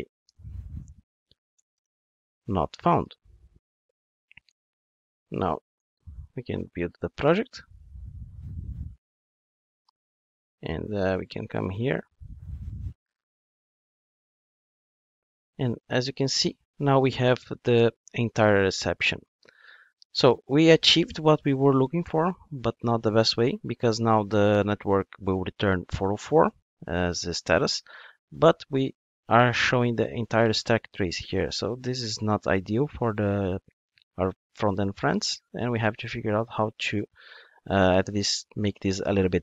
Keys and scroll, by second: 5.8 super+F9.